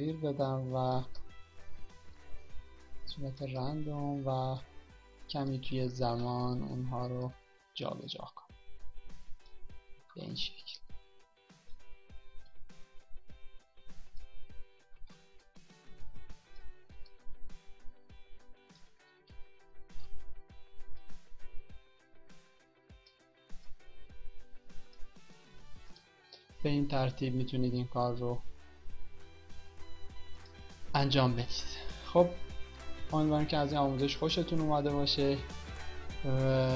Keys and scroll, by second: 6.8 ctrl+d, 10.5 ctrl+d, 15.0 ctrl+d.